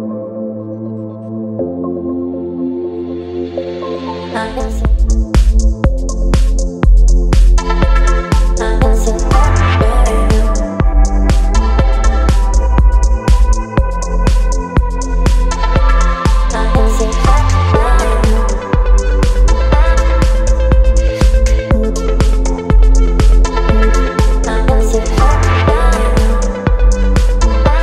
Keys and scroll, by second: 1.8 ctrl+t, 4.6 Return, 6.4 space, 7.9 Right, 8.4 space, 10.1 Down, 10.3 Down, 10.4 Down, 10.5 Down, 11.2 Down, 13.0 space, 18.2 ctrl+t, 20.9 Return, 23.5 z, 25.0 v.